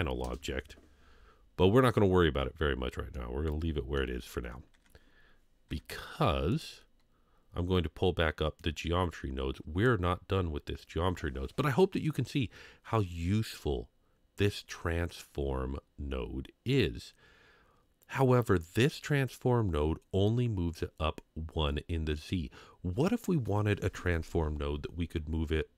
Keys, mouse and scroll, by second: 3.1-4.0 middle drag, 6.5 click, 8.6-9.9 drag, 13.8-15.8 scroll up 1, 16.1-19.6 scroll up 1, 19.6-20.4 scroll up 2.